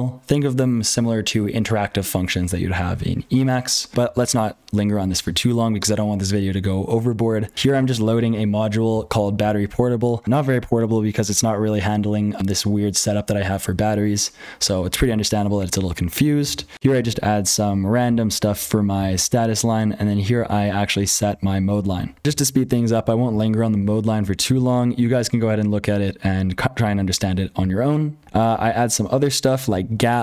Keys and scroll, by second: 0.0-30.2 typing, 7.6 ctrl+[, 21.7 ctrl+[, 22.2 F12, 22.2 ctrl+l, 26.8 ctrl+l, 27.5 ctrl+l.